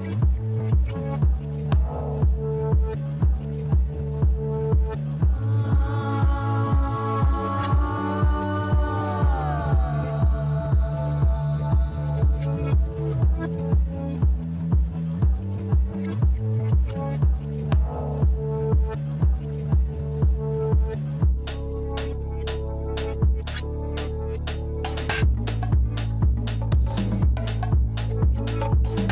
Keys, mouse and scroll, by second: 0.5 shift+z, 0.9-4.0 middle drag, 4.2 KP_3, 5.2 scroll up 1, 6.5 e, 9.3 shift+z, 9.8 middle click, 10.6 shift+z, 11.3 Tab, 12.1 scroll down 1, 12.5-14.6 middle drag, 14.6 click, 15.8 g, 17.7 click, 20.3-23.5 drag.